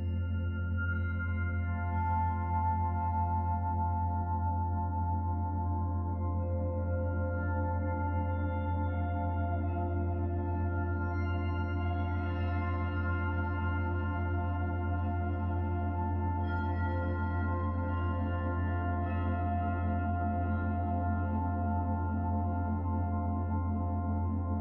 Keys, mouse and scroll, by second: 1.0 click, 4.6 click, 6.7 click, 8.4 click, 12.5 click, 16.5-17.3 scroll down 1, 17.3 middle click, 18.1-19.6 scroll up 1, 19.8 click, 20.9 Tab, 23.0 click, 23.8 click.